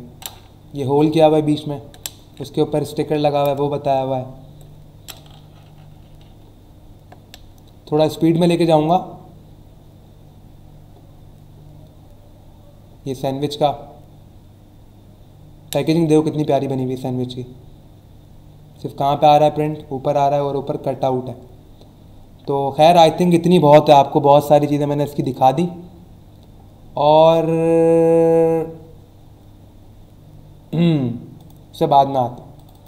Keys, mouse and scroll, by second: 5.4-6.0 scroll down 2, 6.6-7.6 scroll down 3, 8.1 scroll up 1, 10.2 scroll up 1, 11.1 scroll down 1, 13.0 scroll down 1, 27.0 click, 31.3 click, 32.5 click.